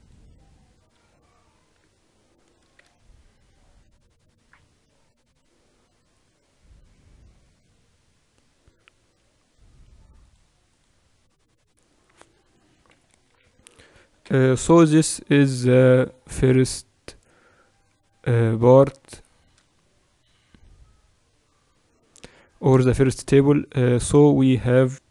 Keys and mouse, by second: 0.0-2.1 drag, 2.2-10.1 middle drag, 10.1-12.8 drag, 12.8 KP_1, 14.5 KP_8, 14.9 KP_6, 15.2 KP_6, 16.3 KP_6, 16.9 KP_6, 19.6-23.1 middle drag, 23.1-25.1 drag.